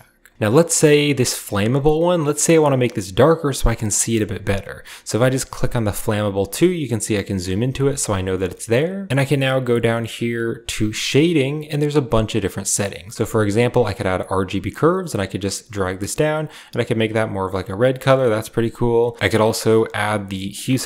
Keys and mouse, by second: 0.6 shift+click, 6.9-7.8 drag, 8.2 middle click, 10.3 click, 13.2 click, 14.7 click, 15.2 click, 15.5 click, 16.4 click, 17.7 drag, 18.9 click, 20.3 click, 20.5 typing.